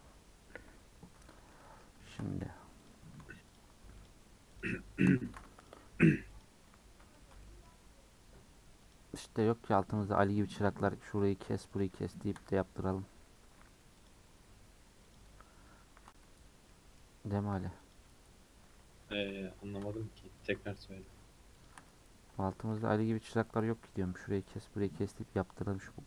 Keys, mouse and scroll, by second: 1.3-2.3 middle drag, 2.3 scroll up 1, 2.9 alt+click, 3.5 alt+shift+click, 4.1 alt+shift+click, 4.6 alt+shift+click, 5.3 ctrl+z, 5.7 alt+shift+click, 6.4 alt+shift+click, 7.1-8.9 shift+middle drag, 8.9 alt+shift+click, 10.3 alt+shift+click, 10.7 middle click, 11.2 scroll up 1, 11.8 alt+shift+click, 12.5-14.1 middle drag, 14.1 alt+shift+click, 15.1 alt+shift+click, 16.7-17.9 middle drag, 17.9 click, 19.2 alt+click, 20.4 alt+shift+click, 20.7 shift+middle click, 21.6 alt+shift+click, 22.4 shift+middle click, 23.2 alt+click, 23.9 scroll down 1, 24.1-25.8 middle drag, 25.8 scroll up 2.